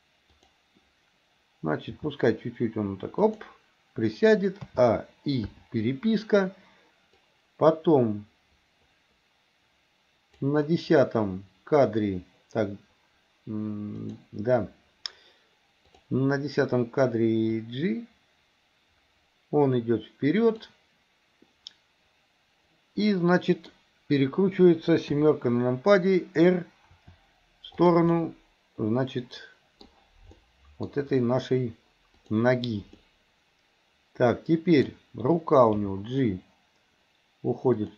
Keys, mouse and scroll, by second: 0.4 click, 2.1 g, 4.7 a, 5.5 i, 7.3-10.5 drag, 14.0 click, 16.0 click, 17.9-20.7 drag, 23.2-23.7 middle drag, 25.2 KP_7, 27.0 r, 28.1-29.9 middle drag, 30.4 middle click, 32.2 click, 33.0-34.9 middle drag, 35.9 g.